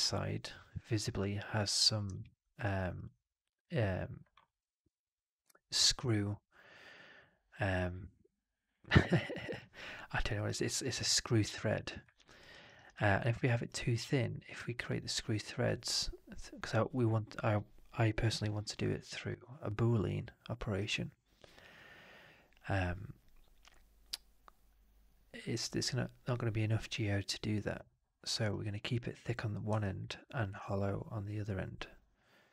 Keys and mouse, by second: 2.1 alt+middle click, 2.5 alt+right click, 2.9 alt+click, 12.0 alt+right click, 12.3 alt+right click, 12.5 alt+right click, 12.7 alt+right click, 12.9 alt+click, 13.2 alt+middle click, 13.4 alt+right click, 13.7 alt+click, 28.3 alt+right click, 28.5 alt+click, 28.8 alt+middle click, 29.7 alt+click, 30.4 shift+Tab.